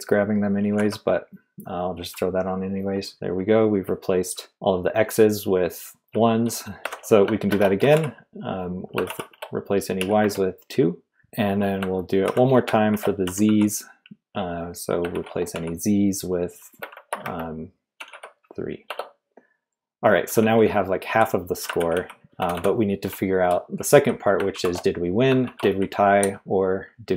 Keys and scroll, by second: 0.7 typing, 3.1 Return, 4.4 g, 6.1-13.9 typing, 15.1 shift+z, 15.5 /, 16.5-18.6 typing, 18.9 Return, 20.2-26.6 typing, 21.8 ctrl+d, 21.9 ctrl+d.